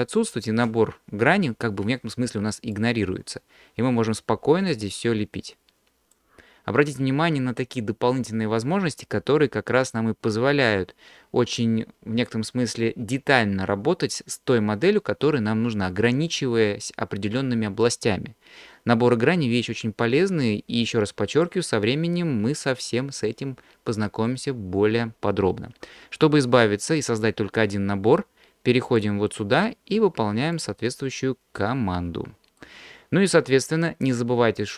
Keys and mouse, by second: 2.8-6.2 drag, 21.4-24.1 drag, 28.9-30.7 drag, 31.8 middle click, 34.6 middle click.